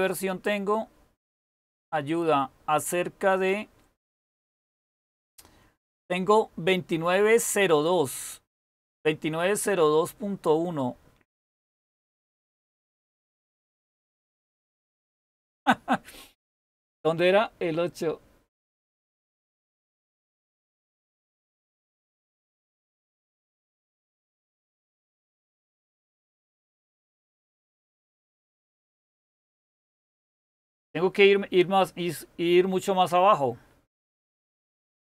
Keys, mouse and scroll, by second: 0.1-1.1 scroll down 1, 1.1-1.6 scroll down 1, 1.6-3.2 scroll down 1, 3.2-5.2 scroll down 1, 5.2-9.1 scroll down 1, 9.1-13.2 scroll down 1, 13.2-13.6 scroll down 1, 13.6 super+w, 26.0-28.6 scroll down 1, 28.6-29.2 scroll down 1, 29.2-29.7 scroll down 1, 29.7-30.8 scroll down 1, 30.8-32.7 scroll down 1, 32.7-33.2 scroll down 1, 33.2-34.2 scroll down 1, 34.2-35.1 scroll down 1.